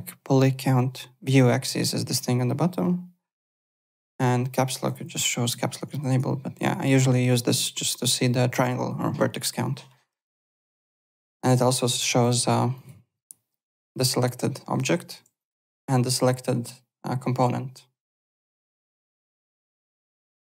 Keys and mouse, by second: 4.5 click, 5.1 Caps_Lock, 11.1 click, 11.9 click, 12.7 click, 14.8-15.6 typing, 15.3 click, 19.4 click, 19.8 alt+Tab.